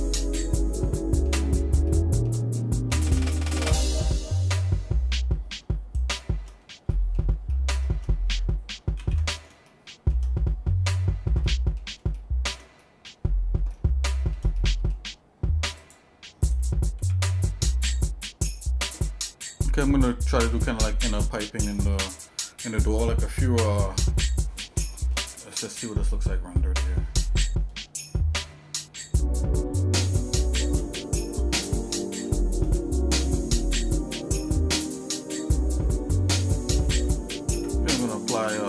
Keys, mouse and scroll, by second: 1.9 shift+middle click, 2.6 middle click, 3.3 shift+middle click, 6.0 shift+right click, 6.9 middle click, 7.5 middle click, 9.1 ctrl+s, 9.7 shift+middle click, 11.4 middle click, 12.2 shift+middle click, 12.8 middle click, 13.7 shift+middle click, 14.6 middle click, 15.8 click, 16.5 click, 17.0 shift+a, 20.8 shift+middle click, 21.3-21.7 scroll down 2, 21.7 middle click, 24.9 middle click, 27.3 click, 30.0 shift+middle click, 31.9 shift+middle click, 36.5 shift+middle click, 37.5 Tab, 38.5 Tab.